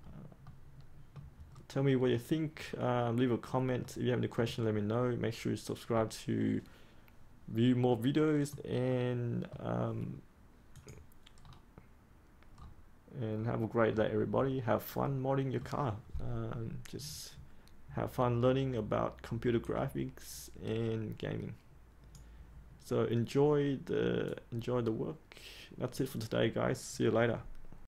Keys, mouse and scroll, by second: 0.4 middle click, 1.4-2.0 scroll down 1, 2.0-3.8 scroll up 1, 3.8-9.9 middle drag, 10.7 click, 11.4-13.8 scroll down 1, 13.8-15.0 scroll up 1, 15.0 middle click, 22.1-26.1 drag.